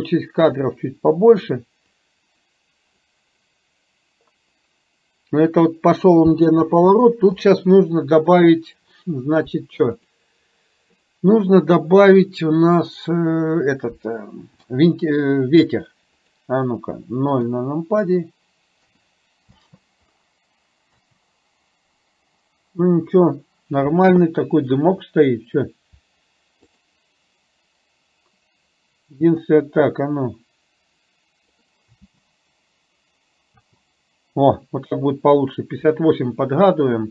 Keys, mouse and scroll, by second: 2.0-3.0 drag, 6.7 space, 10.0 click, 14.7 r, 17.4 KP_0, 19.0 KP_0, 19.5 space, 21.0 space, 24.3-24.8 shift+middle drag, 26.8 click, 30.5-31.8 drag, 32.2 space, 33.7 space.